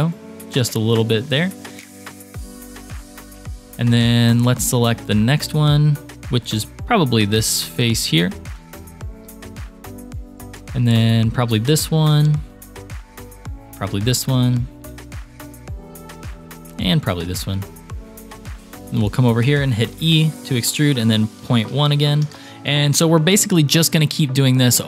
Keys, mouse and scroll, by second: 1.5 shift+middle click, 2.2 middle click, 2.7 shift+middle click, 3.3 KP_3, 3.8 shift+middle click, 6.0 shift+click, 8.0 shift+click, 8.8-10.0 shift+middle drag, 10.3 shift+middle click, 11.1-12.4 shift+drag, 12.6 shift+middle click, 13.4-14.5 shift+drag, 14.9 shift+middle click, 16.6-17.8 shift+drag, 18.6 middle click, 20.1 e.